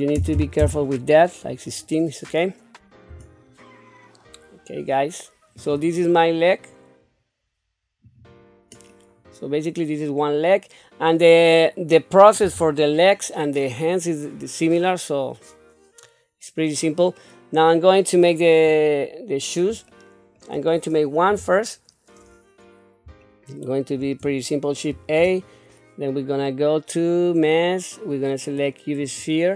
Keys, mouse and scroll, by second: 3.1 Tab, 5.5-8.4 drag, 8.9-11.4 middle drag, 12.4 KP_7, 17.2 middle click, 19.0 middle click, 19.9 shift+middle click, 21.2 KP_1, 23.2 shift+middle click, 24.9 shift+a.